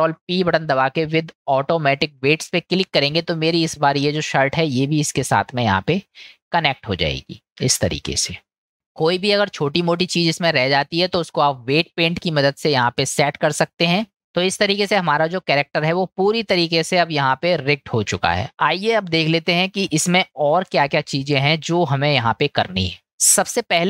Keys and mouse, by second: 0.0 ctrl+p, 4.7 click, 7.1 click, 10.4-11.5 middle drag, 12.5-12.8 middle drag, 14.4-18.6 middle drag, 20.3-21.7 middle drag.